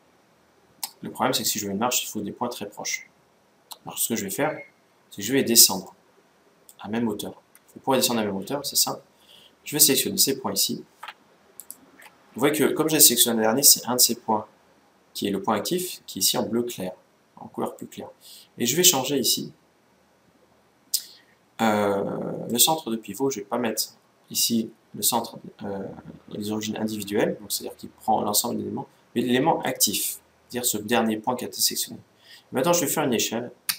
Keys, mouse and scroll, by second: 2.7-4.6 middle drag, 5.6-7.4 middle drag, 11.4-13.0 right drag, 15.5-16.0 scroll up 1, 16.0-17.3 middle drag, 16.0-17.7 scroll down 1, 22.2-24.0 drag, 33.4 s.